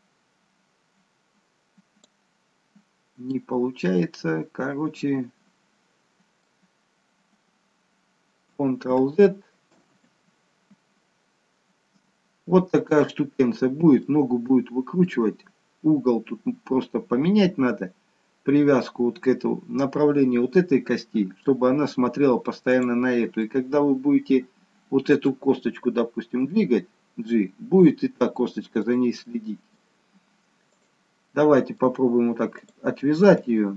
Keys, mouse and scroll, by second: 2.9-3.5 scroll down 2, 3.3 middle click, 9.0 ctrl+z, 10.0 ctrl+z, 14.1 middle click, 22.8 click, 23.5 middle click, 26.6 g, 29.3 middle click, 31.5 middle click, 32.6 click.